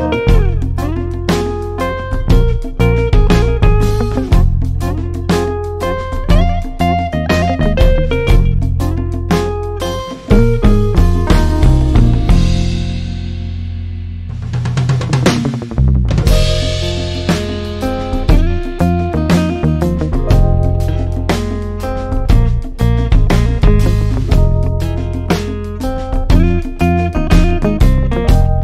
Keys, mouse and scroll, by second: 20.0-22.0 scroll down 1, 24.3-28.6 drag.